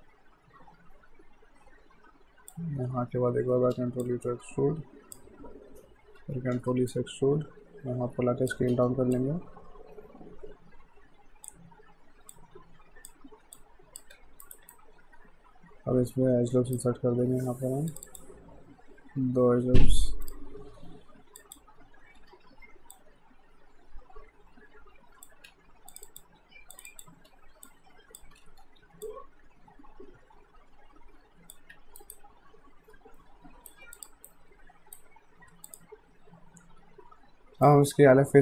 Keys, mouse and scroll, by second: 3.3 e, 4.0 click, 6.2 e, 6.9 click, 8.6 r, 9.1 click, 14.1 q, 14.5 right click, 14.7 shift+right click, 17.9 click, 20.3 click, 22.2 r, 22.9 click, 25.5 q, 25.9 click, 27.3 w, 27.7 click, 28.4 ctrl+z, 29.0 click, 31.7 q, 32.0 right click, 34.0 click, 34.3 right click, 35.7 click, 37.7 alt+right click.